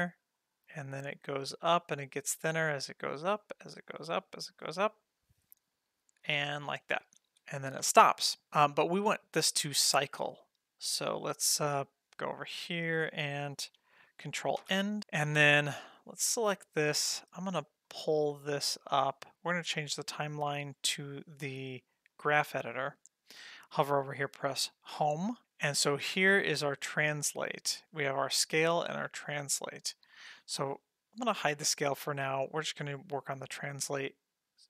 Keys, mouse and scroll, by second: 7.0 space, 7.3 space, 7.9 space, 8.4 click, 8.6 middle click, 10.2 middle click, 11.8 click, 14.6 ctrl+End, 15.0 middle click, 16.0 click, 17.9-19.2 drag, 19.9-22.3 drag, 24.9 Home, 26.5 click, 28.1 click, 29.0 click, 31.6 click.